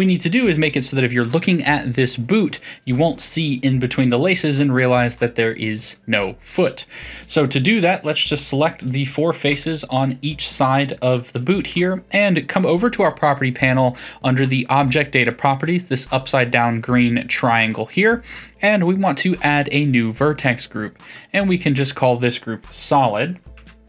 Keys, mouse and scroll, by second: 7.6 Tab, 7.9-14.0 middle drag, 14.6 click, 19.2-21.0 drag, 21.1-23.8 drag.